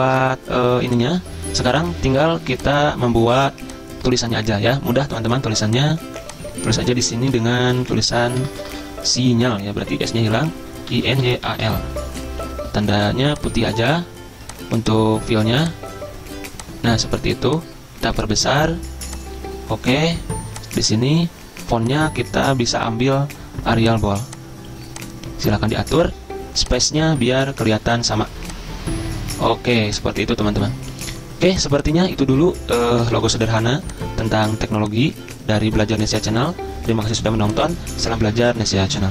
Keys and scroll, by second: 7.3-8.5 typing, 10.6-12.1 typing, 12.1 Escape, 15.8-16.6 typing, 32.9 ctrl+g, 33.0-33.5 typing.